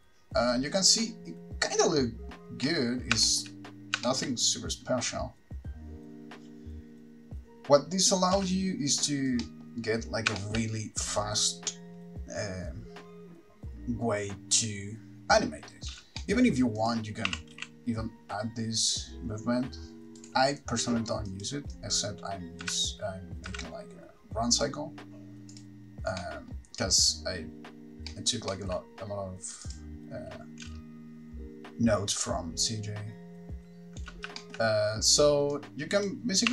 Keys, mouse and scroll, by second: 2.1 middle click, 2.9 middle click, 3.5 shift+middle click, 4.3 middle click, 8.6 space, 9.6 middle click, 10.6 shift+middle click, 10.9-11.3 scroll down 1, 11.3 space, 16.1 space, 16.4 middle click, 17.1 click, 17.6 r, 20.5 right click, 21.5 click, 21.9 click, 24.9 click, 24.9 x, 25.8 click, 26.4 middle click, 28.3 middle click, 28.7 shift+middle click, 30.0 click, 30.8 space, 34.3 space, 34.6 shift+middle click, 35.7 click.